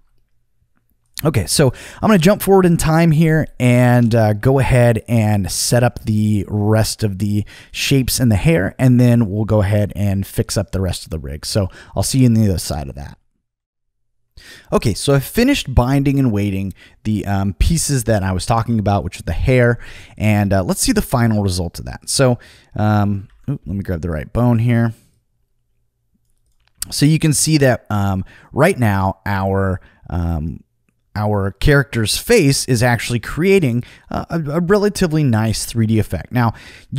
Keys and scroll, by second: 23.2 super+z.